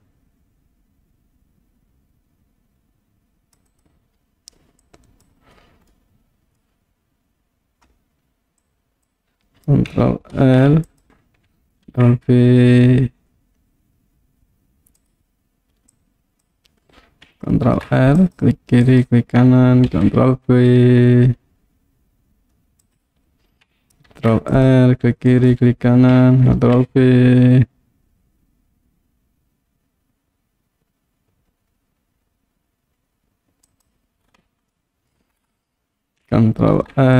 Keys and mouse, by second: 3.7 click, 4.8 click, 6.0 middle click, 8.8 click, 10.4 ctrl+r, 11.1 right click, 11.9 ctrl+b, 15.0 click, 15.9 click, 17.7 ctrl+r, 18.9 right click, 20.0 ctrl+b, 22.9 click, 24.1 ctrl+r, 25.4 right click, 26.7 ctrl+b, 33.7 click, 34.8 middle click, 36.7 ctrl+r.